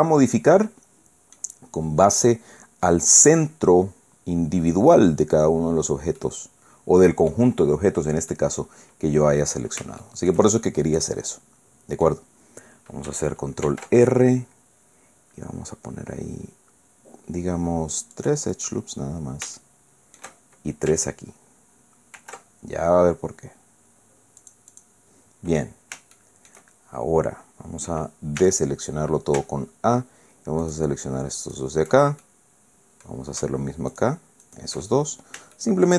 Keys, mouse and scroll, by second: 6.2 click, 6.5 scroll down 1, 7.6-8.0 scroll up 1, 8.2 scroll down 1, 8.3-9.7 drag, 10.0 shift+click, 10.6-12.3 shift+drag, 13.7 ctrl+r, 15.1-15.5 scroll up 2, 16.5-16.9 scroll down 4, 18.1 click, 19.6 shift+click, 22.1 ctrl+r, 24.4 click, 26.1 shift+click, 28.4 a, 30.6 alt+shift+right click, 31.4 alt+shift+right click, 32.2-33.3 alt+shift+middle drag, 33.9 alt+shift+right click, 34.5 alt+shift+right click, 34.9-35.4 alt+shift+scroll down 4, 35.5 shift+middle click.